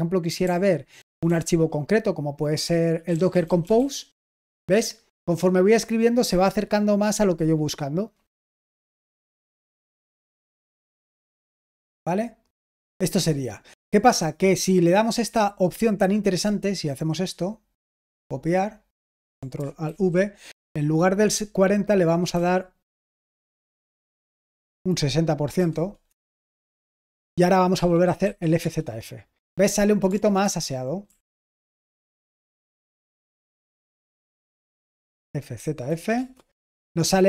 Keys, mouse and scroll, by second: 0.3 typing, 2.7-4.2 typing, 10.1 typing, 15.2-19.9 drag, 17.8 right click, 19.9 ctrl+alt+v, 22.3 alt+b, 23.0 alt+b, 23.2 alt+b, 23.6 alt+b, 24.7 Delete, 25.5-26.0 typing, 27.5-28.7 typing, 30.4 ctrl+l, 31.0 ctrl+l, 32.5 ctrl+l, 33.3 ctrl+c.